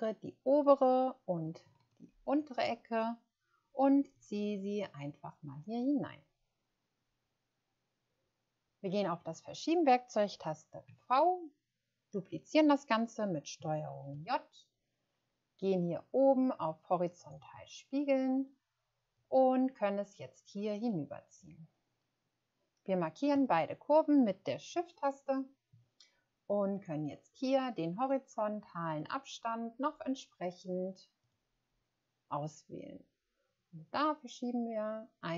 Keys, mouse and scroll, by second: 1.9 shift+click, 10.9 v, 13.9 v, 14.3 ctrl+j, 23.4 shift+click, 33.5 scroll up 1, 34.6-35.1 scroll up 1.